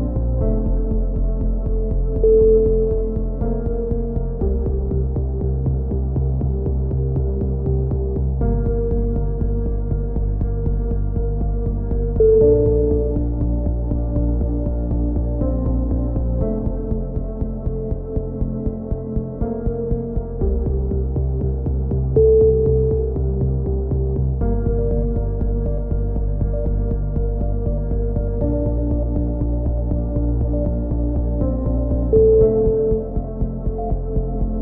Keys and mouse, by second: 0.1 z, 0.6 Tab, 1.7 click, 2.6-4.2 middle drag, 4.2 click, 4.5 Tab, 4.7 z, 5.1 middle click, 6.0 click, 6.2-7.2 middle drag, 6.3 z, 6.7 z, 7.2 right click, 8.1 click, 9.2 a, 9.7 z, 10.0 z, 10.8 ctrl+z, 11.4 click, 11.7 right click, 11.8 click, 12.3 click, 14.7 a, 15.1 z, 15.3 middle click, 16.5 z, 17.9 click, 18.5 KP_3, 19.0 z, 19.2 z, 20.5 b, 22.6 ctrl+KP_7, 23.2-24.2 middle drag, 25.0 g, 26.8 click, 27.7 g, 31.1-32.4 middle drag, 31.3 a, 32.4 b, 34.0 middle click.